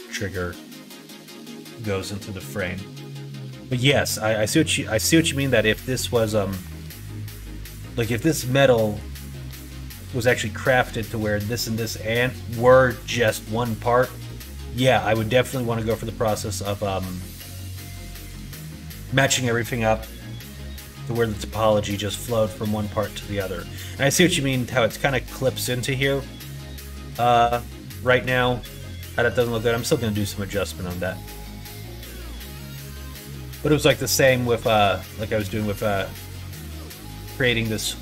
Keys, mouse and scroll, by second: 3.0 middle click, 4.4 middle click, 5.0 middle click, 5.8 click, 6.6 Tab, 8.6 middle click, 9.4 shift+middle click, 10.0 middle click, 15.0 middle click, 15.4 middle click, 15.9 middle click, 22.8 middle click, 28.0 middle click, 29.0 middle click, 30.9 middle click, 31.6 middle click, 32.2 middle click, 32.5 middle click, 33.0 shift+middle click, 33.6 middle click, 34.2 middle click, 34.6 Tab, 35.4 Tab, 35.8 click, 36.1 middle click, 36.7 middle click, 37.4 middle click.